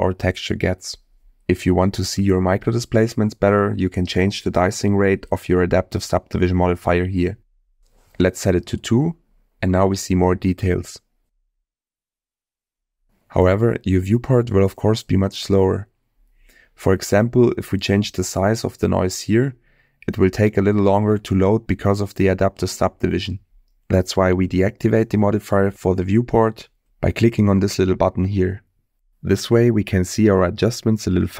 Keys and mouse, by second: 1.6-2.8 middle drag, 6.6-8.5 drag, 11.7 click, 13.0 click, 13.6 click, 14.8-15.5 middle drag, 16.1 middle click, 17.0-17.6 middle drag, 18.5 middle click, 20.9-24.6 drag, 30.4 click.